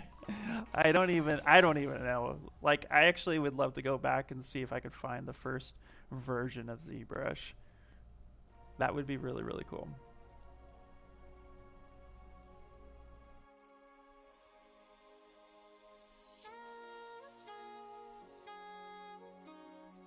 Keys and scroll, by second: 1.4 s.